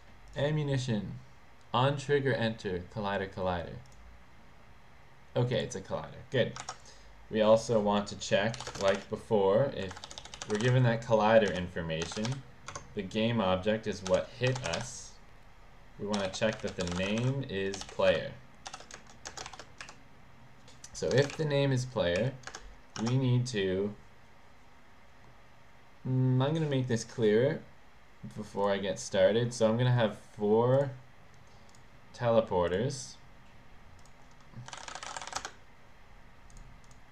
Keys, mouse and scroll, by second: 0.5 click, 4.0 click, 5.6 click, 8.7-12.1 typing, 12.7 Tab, 13.9-18.7 typing, 19.0 Return, 19.9 Up, 21.2 Return, 21.4 Up, 22.2 Up, 22.6 Return, 23.1 ctrl+s, 27.0 click, 28.7 click, 31.8 click, 32.8 click, 34.2 click, 34.8-36.0 typing, 36.6 click, 37.0 click.